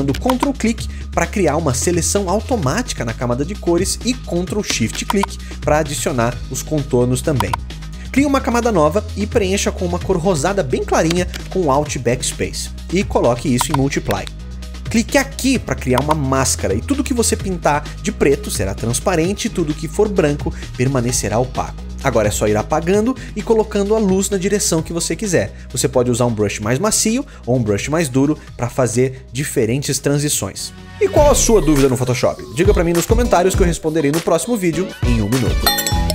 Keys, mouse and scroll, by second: 0.0-1.9 ctrl+drag, 5.0-7.1 ctrl+shift+drag, 11.1 alt+BackSpace.